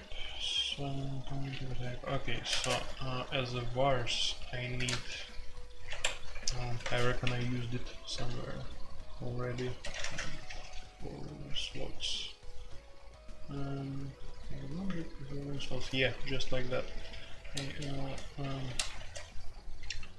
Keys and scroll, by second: 1.7-3.2 typing, 4.7-8.6 typing, 9.8-10.7 typing, 12.7-13.4 typing, 17.4 ctrl+g, 17.9-19.0 typing.